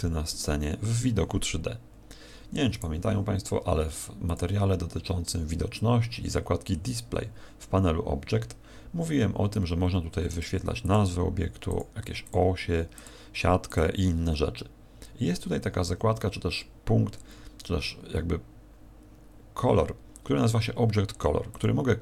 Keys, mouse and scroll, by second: 2.7 right click, 4.2 click, 10.2 click, 10.8 click, 11.6 click, 12.2 click, 12.9 click, 13.6 click, 21.4 click.